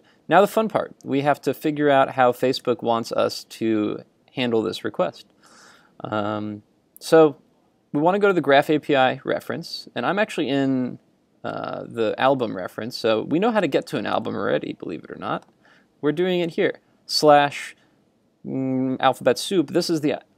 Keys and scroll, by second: 2.7 super+r, 13.6 super+Tab.